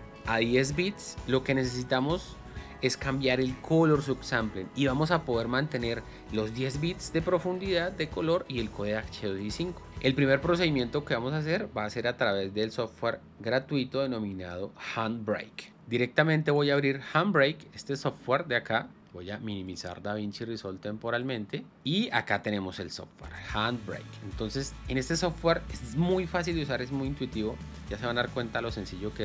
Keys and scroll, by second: 16.1 Escape.